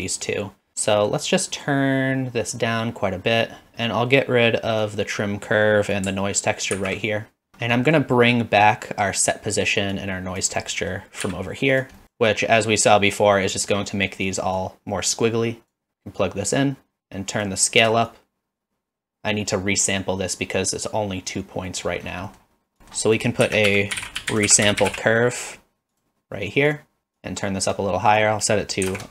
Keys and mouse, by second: 0.9 middle click, 1.2-3.7 drag, 4.8-6.1 drag, 6.7 ctrl+x, 7.8 middle click, 10.0 click, 10.7 middle click, 12.0 click, 14.6-15.7 drag, 16.4-17.5 drag, 18.2-19.2 shift+drag, 19.2 middle click, 21.8 middle click, 23.0 click, 23.4 shift+a, 27.3 click, 28.2-29.1 drag.